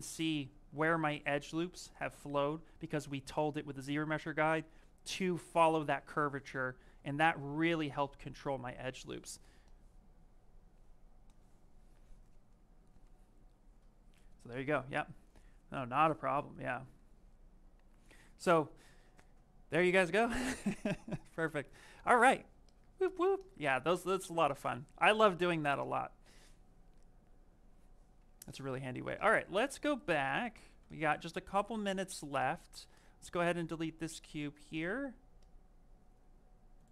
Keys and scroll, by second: 1.1 z.